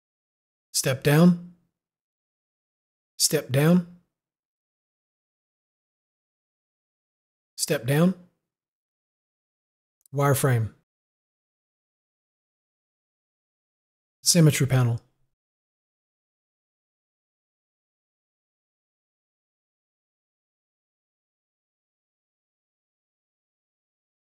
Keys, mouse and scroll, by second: 2.6 click, 2.7 u, 5.3 u, 8.8 u, 11.1 u, 15.7 u, 20.2 click, 21.7 click.